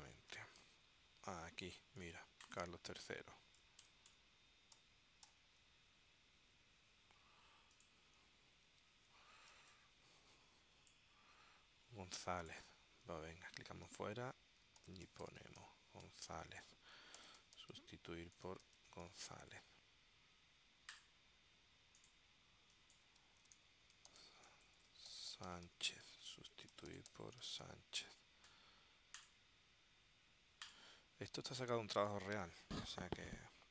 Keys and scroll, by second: 3.9 BackSpace, 4.9 shift+i, 9.2 super+s, 9.6 space, 13.7 super+f, 14.6-19.7 typing, 23.4-28.3 typing.